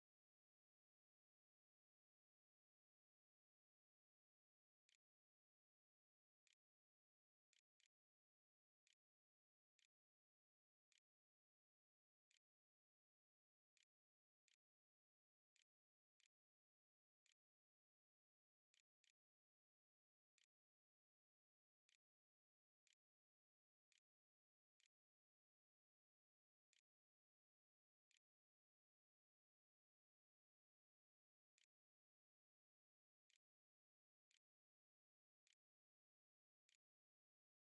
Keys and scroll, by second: 3.5-4.6 typing, 6.3 Return, 6.9 Up, 7.0-27.9 typing, 30.9-33.5 typing, 33.6 Return, 34.5 shift+Up, 34.8-37.6 typing.